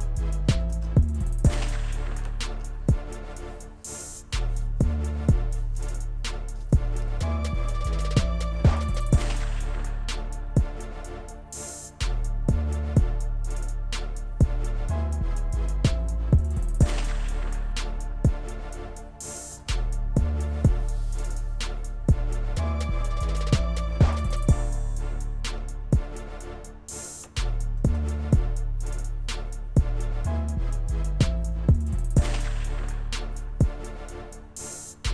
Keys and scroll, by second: 0.8 ctrl+s, 19.7 ctrl+s, 27.9 ctrl+s.